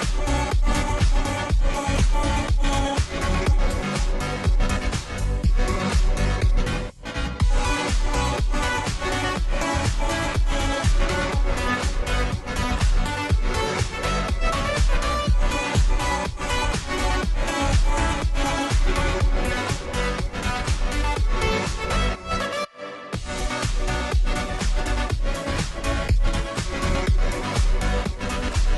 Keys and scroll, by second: 2.8-3.7 space, 25.1-25.6 ], 27.7 ], 27.7 [, 27.9 [.